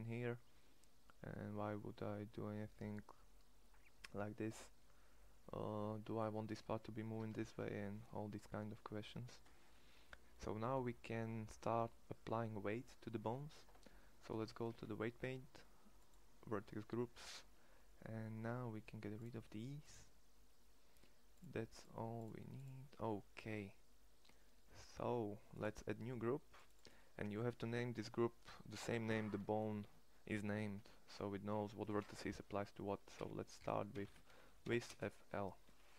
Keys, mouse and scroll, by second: 6.9 Tab, 14.5 ctrl+Tab, 25.2 click.